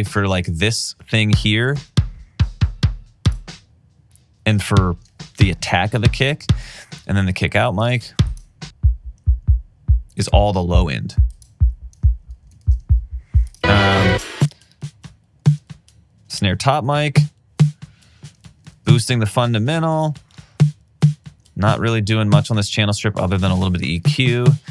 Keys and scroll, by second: 6.8 alt+super+w, 12.7 alt+super+w, 18.8 alt+super+w, 23.7 alt+super+w.